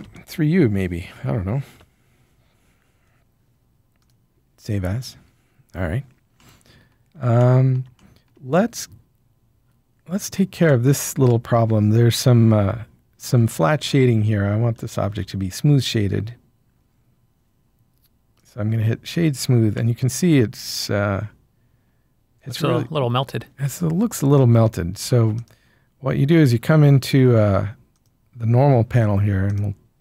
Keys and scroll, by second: 1.7 Return.